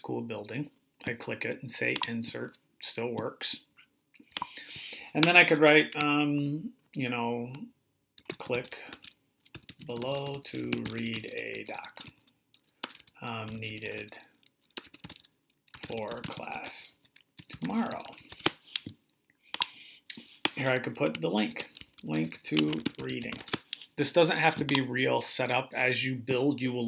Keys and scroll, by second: 7.8-18.5 typing, 21.0-23.8 typing.